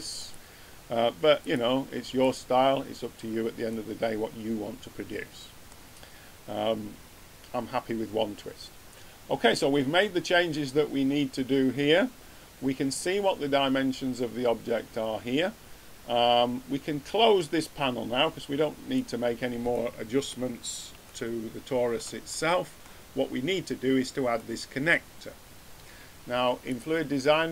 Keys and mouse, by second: 0.3 click, 1.4 click, 4.1-5.5 middle drag, 19.6 middle click, 26.6-27.5 drag.